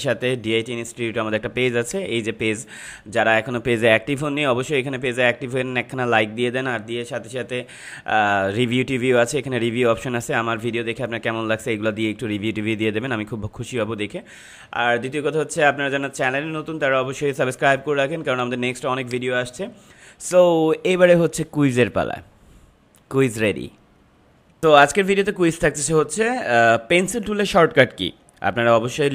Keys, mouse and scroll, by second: 1.8 click, 8.5 scroll down 1, 16.9 scroll up 1, 18.9 click, 24.6 ctrl+m.